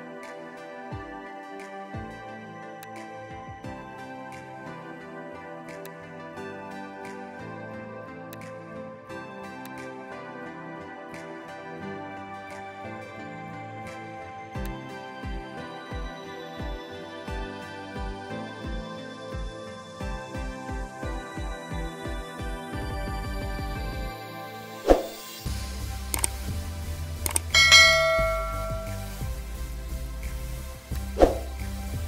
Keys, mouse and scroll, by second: 1.1 ctrl+j, 2.7 alt+click, 8.2 alt+click, 14.1 Return, 26.2 ctrl+j, 30.8 alt+click.